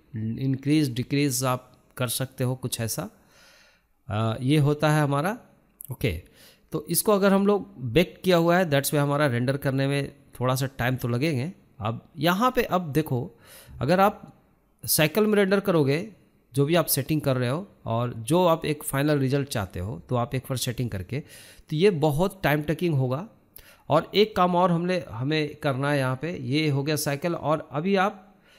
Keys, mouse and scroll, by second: 15.9-16.3 scroll up 1, 16.3-17.6 shift+middle drag, 17.6 click, 18.2-20.2 shift+middle drag, 20.2-27.3 drag, 27.3 shift+middle click, 27.6 scroll down 1, 27.8-28.5 shift+middle drag.